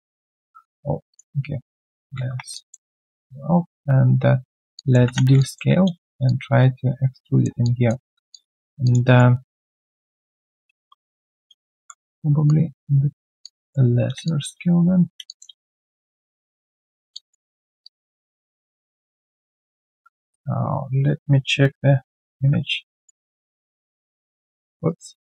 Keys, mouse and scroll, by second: 1.9-2.6 typing, 2.5 alt+click, 4.7 alt+click, 5.0 3, 5.4 alt+click, 6.2 shift+click, 7.6 alt+click, 8.0 alt+scroll down 1, 8.3 alt+click, 8.6 alt+right click, 8.8 alt+click, 9.0 alt+right click, 9.6 typing, 11.5-12.2 typing, 13.4 alt+click, 14.2 alt+click, 15.2 alt+click, 15.7 shift+click, 17.1 alt+click, 18.9 alt+right click, 19.1 alt+click, 19.7 alt+right click, 24.3 ctrl+1, 24.8 right click.